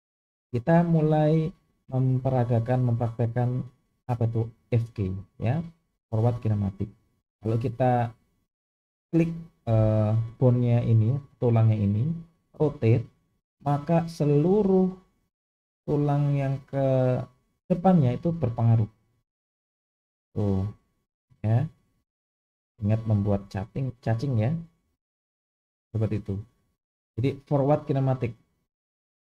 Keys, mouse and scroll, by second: 0.6 click, 12.5 r, 14.7 click, 15.2 click, 15.8 drag, 16.3 click, 17.6 click, 18.7 r, 20.1 click, 20.4 r, 21.6 click, 21.9 r, 23.1 click, 23.5 r, 24.5 click, 24.9 r, 27.1 click.